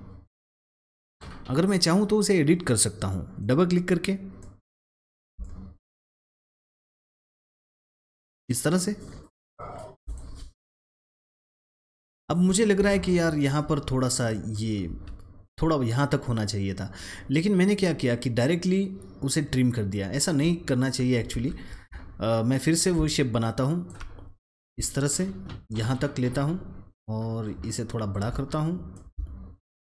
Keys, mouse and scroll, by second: 3.5 double click, 4.3 click, 6.5-7.9 shift+drag, 8.3 double click, 9.5 alt+scroll down 1, 9.9 alt+click, 10.5 alt+scroll up 1, 10.8 click, 12.1 drag, 14.8 a, 17.5-21.2 drag, 21.2 ctrl+x, 22.6 alt+click, 24.5-29.8 alt+drag.